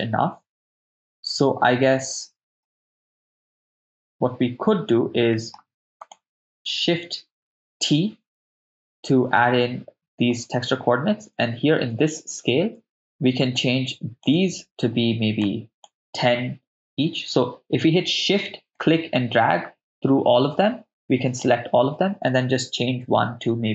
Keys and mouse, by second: 2.6-3.8 middle drag, 5.3 middle click, 6.0 click, 7.9 ctrl+t, 8.8 middle click, 13.5-15.8 shift+drag, 18.8-23.7 shift+drag.